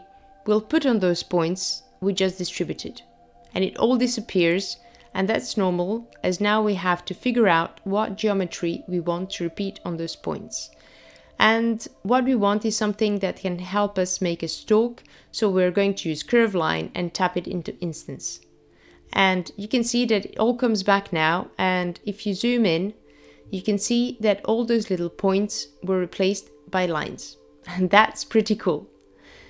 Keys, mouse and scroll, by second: 5.5 click, 7.3 shift+a, 13.9 click, 23.7-24.6 scroll up 3, 24.6-25.8 scroll up 4, 25.8-27.1 scroll up 5, 27.5-28.9 scroll down 7.